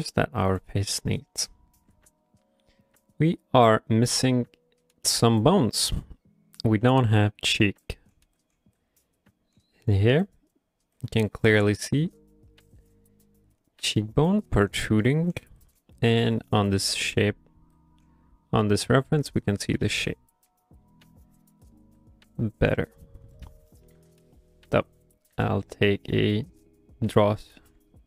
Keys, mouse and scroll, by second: 0.0 middle click, 1.0 shift+middle click, 1.3 middle click, 23.4 right click, 23.7 right click, 25.3 q, 27.7 q.